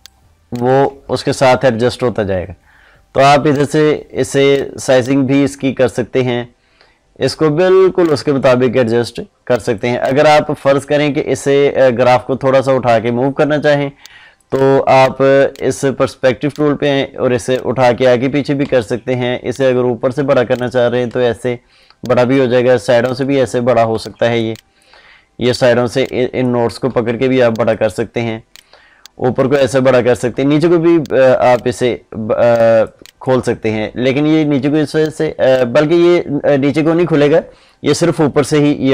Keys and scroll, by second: 18.5 ctrl+z, 30.1 ctrl+z, 36.4 ctrl+z.